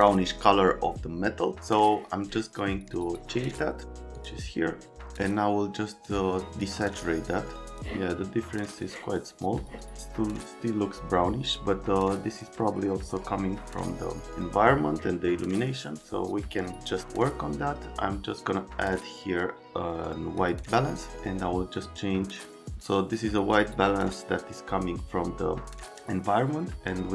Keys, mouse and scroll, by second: 3.0 click, 4.1 click, 6.0 click, 7.6 click, 8.8 click, 15.6 click, 16.9 click, 20.4 click, 21.7 click.